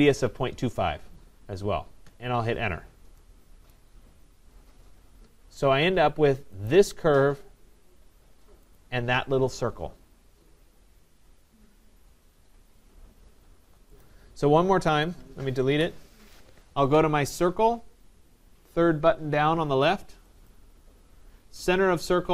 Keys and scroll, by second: 2.0 Return, 15.7 Delete.